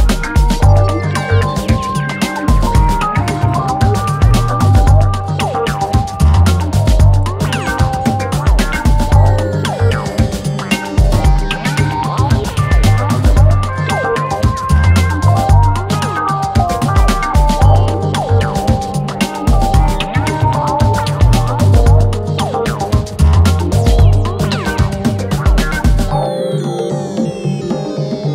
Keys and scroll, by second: 18.3 ctrl+z, 26.6 ctrl+d, 26.7 Escape.